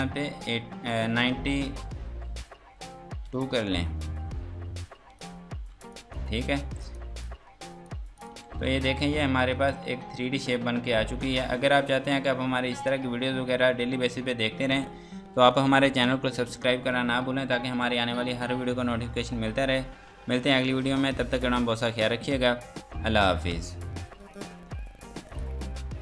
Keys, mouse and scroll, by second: 0.2 KP_8, 1.3 BackSpace, 2.1 KP_9, 3.5 KP_Enter, 5.2 click, 5.7 F2, 5.9 click, 6.4 Escape, 6.8 click, 8.2 click, 8.5 F3, 9.0 click, 9.7 F2, 10.1 Escape, 11.3 scroll down 1, 11.7 F2, 12.0 click, 13.8 F9, 24.2 click.